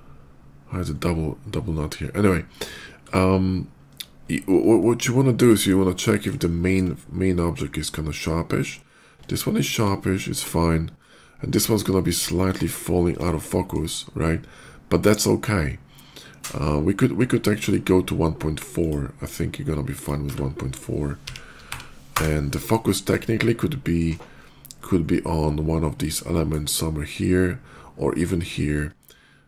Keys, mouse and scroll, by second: 0.5 middle click, 0.7 middle click, 0.9 middle click, 2.7 click, 3.5 click, 3.8 click, 4.0 middle click, 4.6 shift+middle click, 5.7 shift+middle click, 6.2 shift+middle click, 9.0 shift+middle click, 11.0 shift+middle click, 11.2 shift+middle click, 11.5 shift+middle click, 12.5 shift+middle click, 12.8 shift+middle click, 13.0 shift+middle click, 13.1 shift+middle click, 16.0 shift+click, 17.4 click, 18.5 click, 19.8 click, 20.2 1, 21.5 4, 22.0 Return, 22.7 middle click, 23.1 shift+middle click, 24.2 shift+middle click, 24.6 shift+middle click, 24.8 shift+middle click, 24.9 shift+middle click, 25.8 shift+middle click, 28.8 shift+middle click.